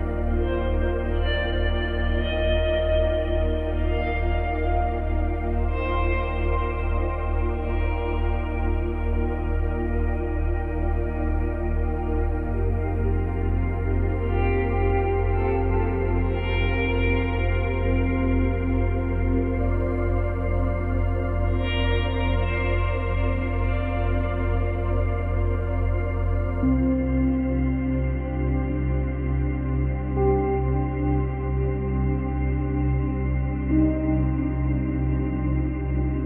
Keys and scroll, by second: 7.7 space, 13.4 space, 20.5 space, 22.4 space, 24.3 space, 28.1 space, 30.2 space, 35.8 space.